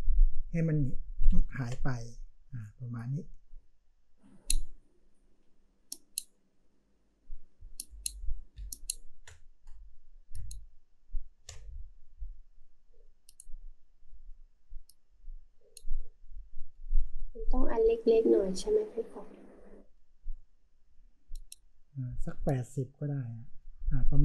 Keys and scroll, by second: 1.4 ctrl+z, 7.8 v, 8.5 space, 10.3 space.